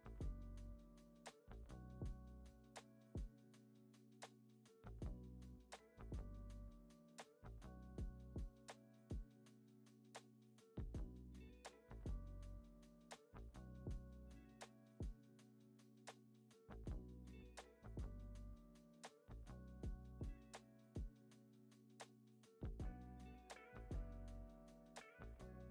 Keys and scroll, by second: 1.0 z, 1.8 x, 6.3 super+c, 6.4 super+v, 8.3 super+s.